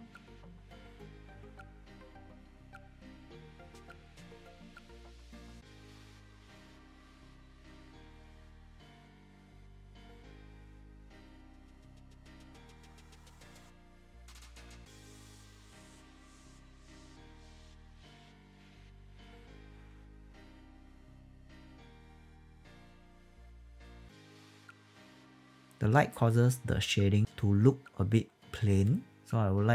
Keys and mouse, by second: 0.0-11.1 typing, 0.2 alt+click, 0.4 click, 0.7 click, 0.9 click, 1.1 alt+click, 1.5 click, 2.2 alt+click, 2.5 click, 3.3 click, 3.4 alt+click, 3.8 click, 4.0 click, 4.4 click, 5.0 click, 5.2 click, 5.5 alt+click, 5.7 click, 6.2 alt+click, 6.7 click, 7.8 click, 8.0 click, 8.6 alt+click, 8.7 alt+click, 8.9 click, 9.1 alt+click, 9.4 alt+click, 9.5 click, 10.0 click, 10.3 alt+middle click, 10.7 click, 11.2 click, 11.7 click, 12.2 alt+click, 12.3 click, 12.5-21.0 typing, 12.9 click, 13.2 click, 13.5 click, 14.5 alt+click, 14.9 click, 15.0 click, 15.2 click, 15.9 alt+middle click, 16.0 click, 16.3 click, 16.8 click, 16.9 alt+click, 17.1 click, 17.6 click, 17.9 click, 18.2 click, 19.6 click, 20.2 click, 20.8 click, 22.0 click, 22.2 -, 22.3 Return, 22.5 click, 23.6 0, 23.7 Return, 23.9 click, 24.0 s, 24.1 click.